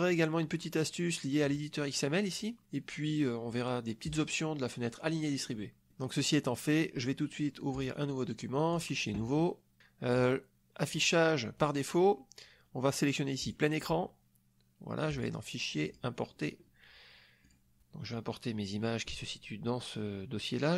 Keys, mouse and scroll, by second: 1.4 click, 4.0 click, 5.4 middle click, 6.7 click, 7.7 click, 8.7 click, 10.2 click, 13.5 click, 15.1 click, 15.9 click, 17.4-18.0 drag, 20.7 click.